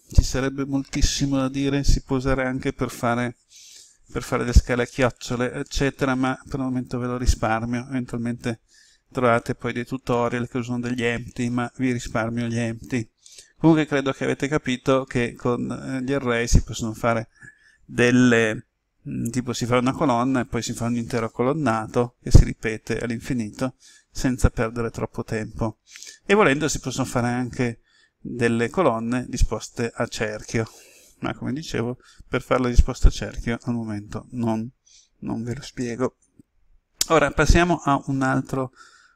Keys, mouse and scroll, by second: 35.2-36.6 scroll down 1, 38.1 alt+middle click.